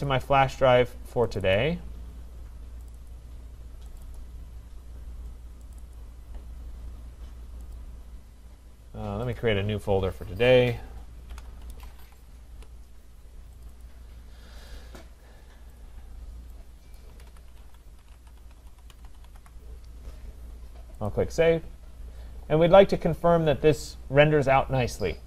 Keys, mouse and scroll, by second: 0.1 click, 1.6 click, 2.9 click, 3.1 click, 4.0 click, 4.2 click, 5.8 click, 6.0 click, 7.8 click, 9.3 click, 11.1-12.5 typing, 13.6 click, 13.8 click, 14.7 click, 15.8 click, 17.0-19.9 typing, 17.0 click, 21.1 click.